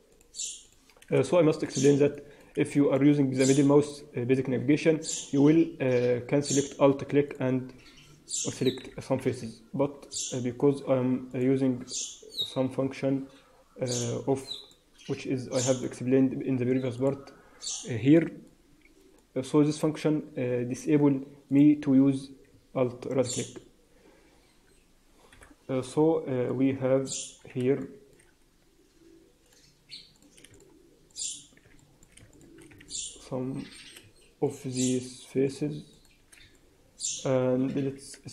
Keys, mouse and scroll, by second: 0.0 click, 0.6 shift+click, 1.7 shift+click, 2.0 middle click, 2.6 shift+middle click, 3.2 scroll up 3, 7.2 middle click, 8.7 f, 9.0-9.4 scroll down 4, 9.4 Tab, 9.7 Tab, 10.0 Tab, 11.3 click, 12.2 scroll down 3, 12.4 Tab, 12.8-13.1 scroll down 2, 13.1-14.2 scroll up 2, 14.2 scroll up 1, 14.4 middle click, 15.6 click, 22.6 Tab, 22.9 Tab, 23.8-24.2 scroll up 3, 24.2-25.2 scroll down 1, 25.2-25.6 scroll down 2, 25.2 KP_1, 25.6 Tab, 26.0 scroll up 2, 26.4 middle click, 27.7 shift+middle click, 29.4 click, 30.1 click, 30.4 shift+click, 31.0 click, 31.7 shift+middle click, 32.2 shift+click, 32.8 middle click, 34.4 shift+click, 34.6 shift+click, 35.4 shift+click, 35.8 shift+click, 36.4 middle click.